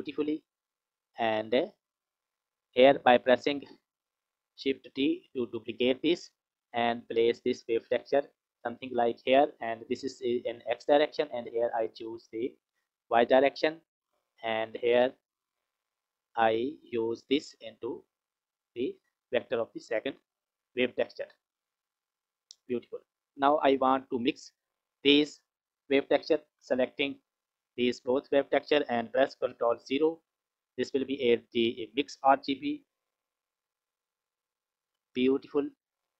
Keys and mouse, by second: 2.5 click, 4.9 shift+d, 7.5 click, 8.3 click, 11.6-12.7 drag, 14.3 click, 15.3 g, 17.2-18.5 drag, 20.6 click, 21.4 click, 21.6 click, 24.1 click, 27.5 shift+click, 29.4 ctrl+KP_0, 31.6 click.